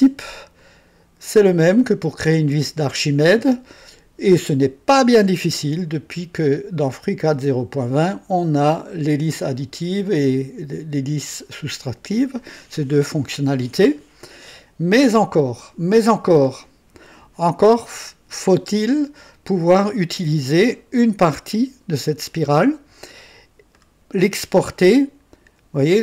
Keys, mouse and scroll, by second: 0.6-4.9 drag, 23.7-26.0 drag.